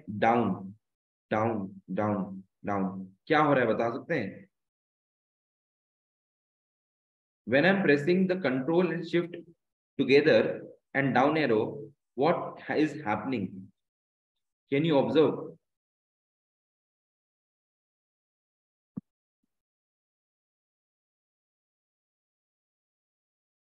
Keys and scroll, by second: 0.1 ctrl+shift+Down, 1.2 ctrl+shift+Down, 1.8 ctrl+shift+Down, 2.4 ctrl+shift+Down, 3.4 ctrl+shift+Up, 4.7 ctrl+shift+Right, 5.2 ctrl+shift+Right, 6.4 ctrl+shift+Left, 6.7 ctrl+shift+Left, 7.2 ctrl+shift+Up, 8.4 Left, 9.4 Right, 10.1 ctrl+shift+Down, 11.2 ctrl+shift+Right, 12.1 ctrl+shift+Down, 13.1 ctrl+shift+Down.